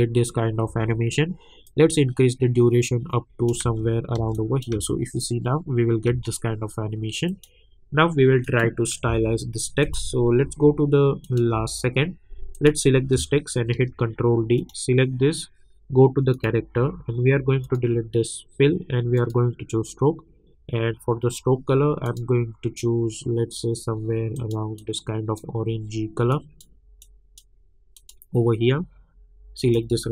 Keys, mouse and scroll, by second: 1.6-3.6 drag, 3.6 space, 4.3 click, 4.7 space, 7.3 click, 9.0 =, 9.8 click, 10.4 k, 11.2 click, 11.5 k, 12.5 click, 13.7 ctrl+d, 14.6 click, 22.0 click, 24.3-27.9 drag.